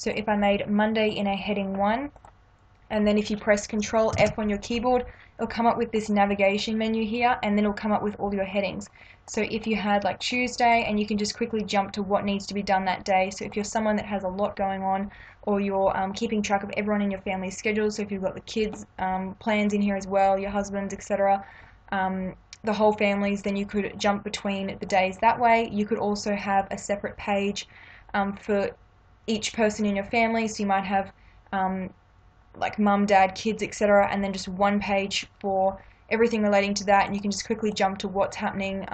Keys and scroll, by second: 4.2 ctrl+f.